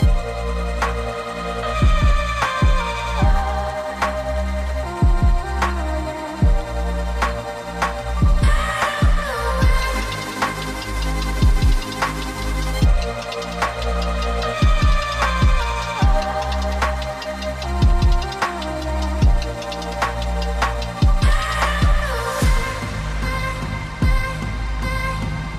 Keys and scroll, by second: 7.3 typing, 7.3 Return, 10.7 typing, 10.8 Return, 22.3 ctrl+z.